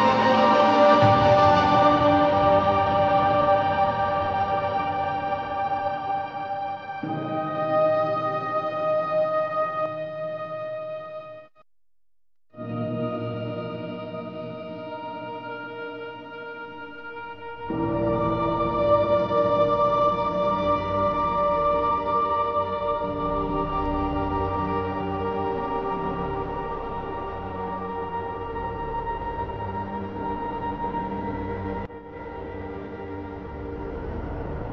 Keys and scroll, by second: 1.1 ctrl+KP_Add, 1.5 typing, 2.5 ctrl+KP_Subtract, 3.0 space, 3.3 ctrl+KP_Add, 4.9 ctrl+t, 6.6 Return, 13.2 ctrl+KP_Add, 13.4 space, 13.8 ctrl+KP_Subtract, 19.6-21.5 typing, 23.4 Return, 23.5 ctrl+t, 27.2 ctrl+KP_Add, 27.4 space, 27.6 ctrl+KP_Add, 29.8 Down, 30.1 Return, 30.5 ctrl+KP_Subtract.